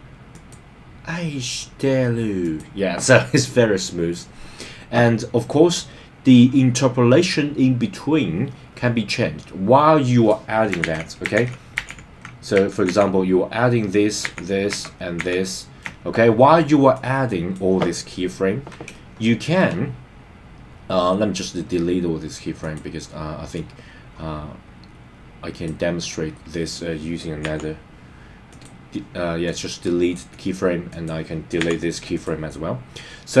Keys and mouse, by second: 0.4 click, 2.4 click, 5.7-10.3 drag, 11.0 super+z, 11.5 super+z, 12.0 super+z, 12.9 super+z, 14.3 super+z, 14.7 super+z, 15.2 super+z, 16.9 click, 19.1 shift+middle click, 22.6 click, 23.5 click, 23.8-25.7 drag, 27.4 x, 29.4 click, 30.9 click.